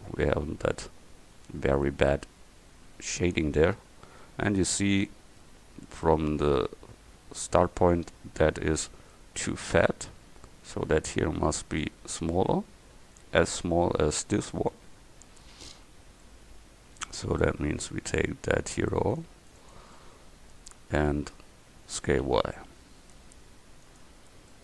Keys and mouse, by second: 0.0 middle click, 5.5-6.1 middle drag, 9.4-10.6 middle drag, 12.0-14.3 middle drag, 15.6 Tab, 17.1 a, 17.7 c, 19.6 click, 22.1 s.